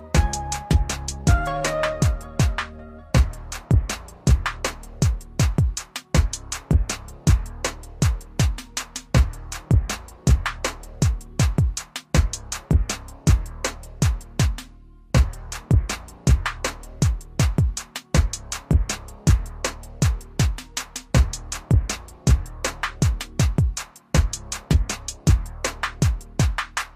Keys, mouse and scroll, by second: 1.0 click, 2.6-4.5 typing, 5.5 click, 9.2 typing, 11.0 click, 11.0 typing, 15.2-16.0 typing, 17.8 typing, 18.1 click.